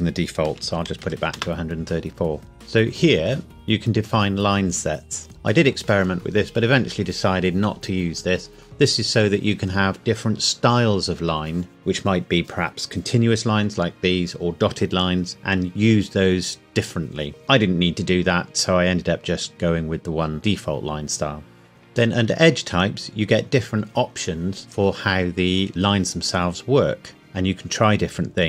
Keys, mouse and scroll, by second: 0.6 KP_1, 0.9 KP_3, 1.0 KP_4, 1.3 KP_Enter, 2.5 click, 21.7 scroll down 1.